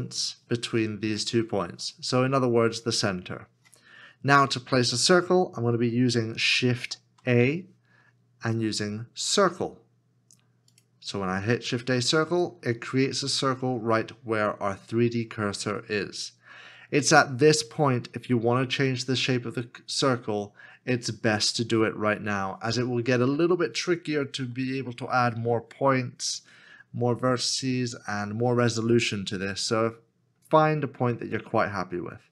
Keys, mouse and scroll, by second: 5.9 shift+click, 6.7 shift+a, 30.7 shift+a.